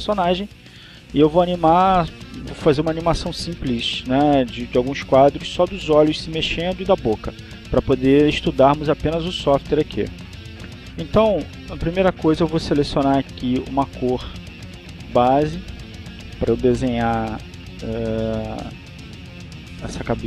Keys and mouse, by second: 13.3 click, 14.9 click, 16.6 click.